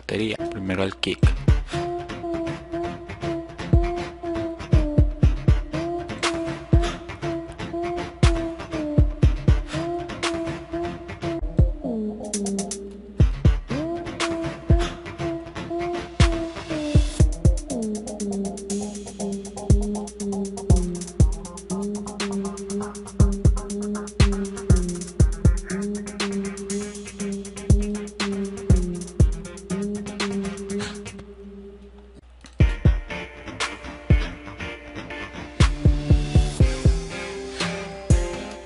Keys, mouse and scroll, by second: 0.3 click, 0.6 click, 3.9 click, 5.7 click, 9.8 click, 10.9 click, 11.9 click.